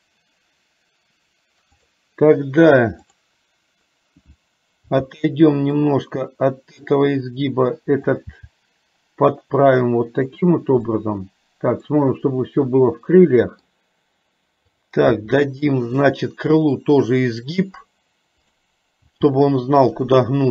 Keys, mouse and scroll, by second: 1.9 click, 5.0 g, 8.1 click, 8.6 g, 11.0-12.1 middle drag, 12.8-13.8 middle drag, 15.1 g, 18.5 click, 19.1 g, 20.4-20.5 middle drag.